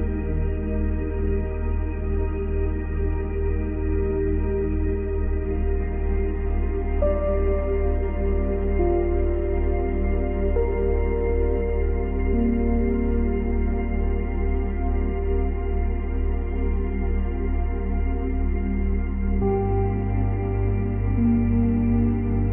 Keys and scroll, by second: 9.5 Delete, 11.1 ctrl+z, 20.3 space.